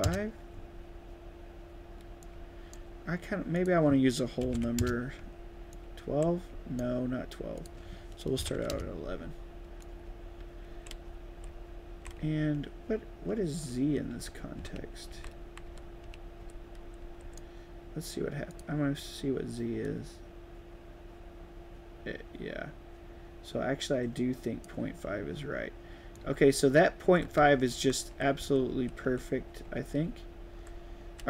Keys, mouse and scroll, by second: 2.1 right click, 2.3 d, 3.5 right click, 5.7 right click, 5.8 a, 6.5 d, 7.5 click, 9.8 right click, 10.0-12.2 typing, 11.0 right click, 13.8-17.5 typing, 15.7 right click, 16.1-17.4 right drag, 18.5 click, 19.8-20.7 drag, 23.6 click, 25.9-30.0 typing, 26.2-27.4 right drag.